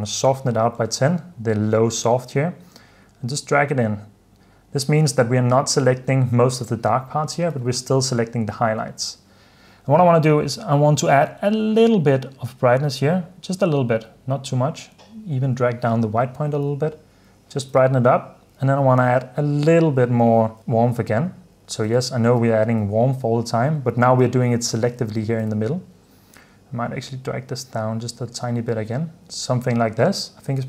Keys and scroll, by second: 0.4-1.3 typing, 2.9 typing, 7.6 h, 16.8 super+d, 17.9 super+s, 20.3-22.8 typing, 22.9 super+f, 23.4 super+d, 24.3 super+d, 25.2 super+f, 25.7 super+s, 28.6 super+d, 29.4 super+s.